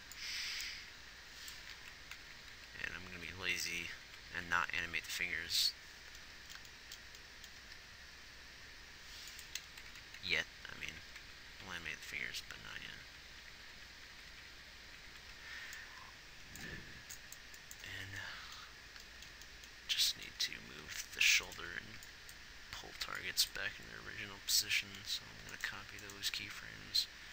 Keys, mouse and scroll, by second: 2.6-3.1 Left, 4.3 Right, 4.5 Right, 4.7 Right, 5.4 Right, 7.9 g, 10.2 Left, 10.4 Left, 10.7 Left, 11.2 Right, 11.5 Right, 11.8 Right, 12.2 Right, 12.5 Right, 12.9-13.6 Right, 13.9 Right, 14.2 Right, 17.7 Right, 20.2-23.4 typing.